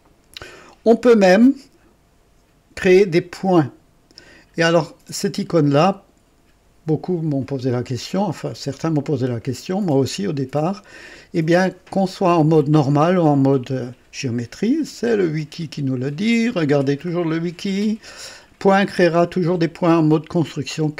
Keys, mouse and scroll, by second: 15.1 click, 16.3 scroll up 1, 17.2-17.8 scroll down 2.